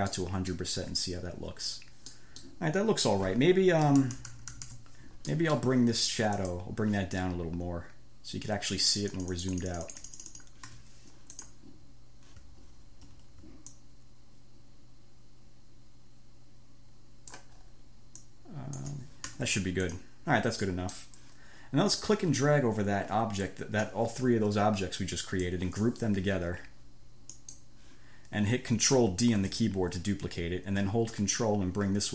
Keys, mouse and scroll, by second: 0.4 click, 2.4 click, 4.1 =, 5.6 click, 6.7 click, 9.2-10.9 drag, 11.0 1, 11.6 click, 12.9-13.4 ctrl+scroll up 2, 14.0-17.4 ctrl+drag, 17.4-19.3 scroll up 3, 19.6 ctrl+1, 20.2 middle click, 20.2 scroll, 20.9 middle click, 20.9 scroll, 22.2-25.9 middle drag, 22.2-23.4 scroll, 27.6 click, 29.6 ctrl+d, 31.4-32.1 ctrl+drag.